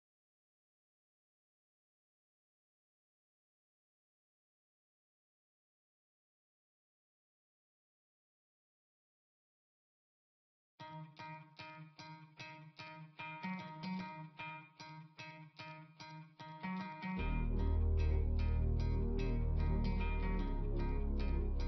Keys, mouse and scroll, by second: 0.6 scroll up 1, 5.1 scroll down 1, 7.8 scroll down 1, 9.1 scroll up 1, 15.6 scroll down 1, 16.5 scroll up 1.